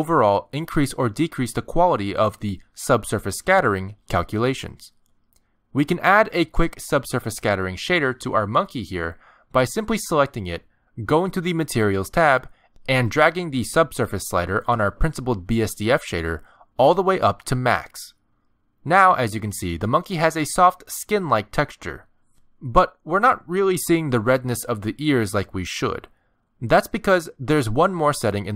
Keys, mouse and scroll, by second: 7.6 click, 8.8 middle click, 11.5 click, 13.0 click, 15.7 click, 19.4 middle click, 20.0-20.3 scroll up 2, 20.5 shift+middle click, 21.5 middle click, 26.6 scroll down 1, 26.8 shift+middle click, 27.3 scroll down 1, 27.8 middle click.